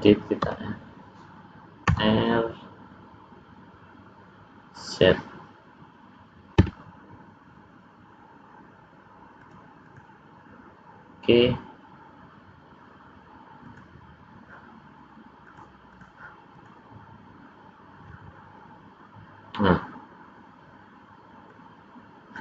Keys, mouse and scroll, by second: 0.5 l, 1.9 r, 9.8 click, 13.6 click, 15.4 click, 16.6 click, 21.5 middle click.